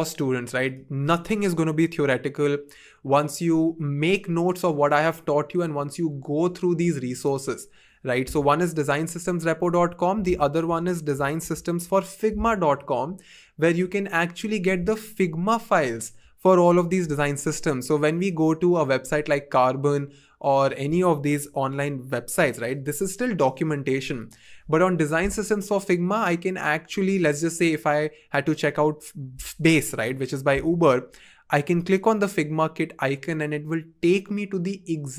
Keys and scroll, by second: 10.2 super+a, 10.6 super+c, 11.1 super+t, 12.6 Return.